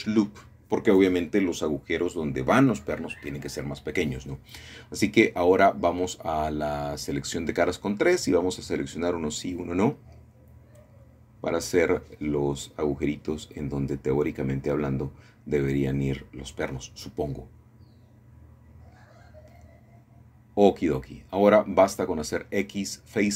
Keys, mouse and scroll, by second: 1.6-3.3 shift+middle drag, 5.0 shift+middle click, 10.2 click, 11.9 shift+click, 12.8 shift+click, 13.5 shift+click, 14.9-18.4 shift+drag, 18.6 shift+click, 20.3 shift+click, 21.1 shift+click, 21.8 shift+click, 22.7 shift+click.